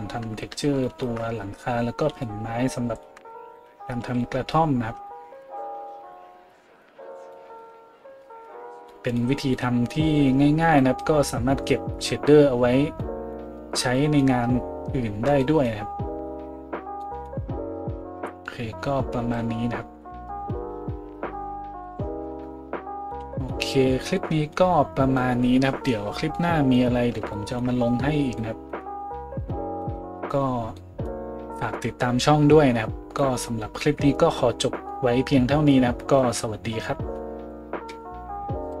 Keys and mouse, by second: 0.5-1.1 shift+right drag, 1.1-38.8 drag, 3.5 middle click, 3.5 right click, 4.0 a.